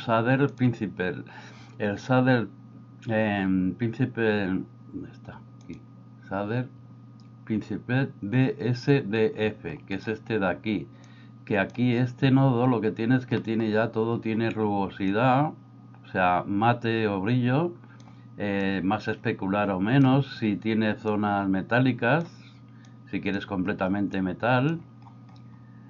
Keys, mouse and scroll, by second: 0.5-10.0 drag, 11.1 click, 13.6 middle click, 15.1-18.1 drag, 18.7-20.0 drag, 21.0-22.3 drag, 23.0 click, 24.3 click.